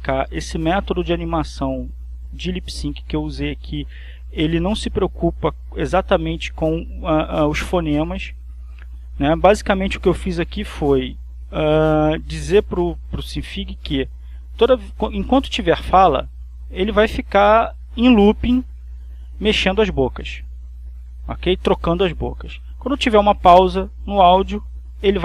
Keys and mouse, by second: 6.0 click, 7.2-10.1 drag, 11.1-12.1 drag, 13.5-18.8 drag, 21.3-25.2 drag.